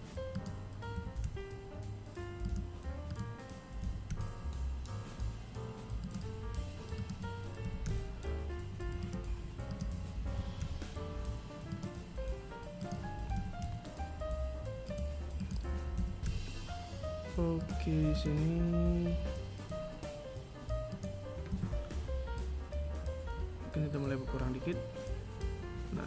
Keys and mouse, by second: 0.1 g, 2.2 right click, 3.0 g, 6.1 right click, 6.8 g, 8.9 right click, 9.5 g, 12.0 right click, 12.5 g, 14.6 right click, 15.1 g, 17.3 right click, 18.2 g, 20.7 a.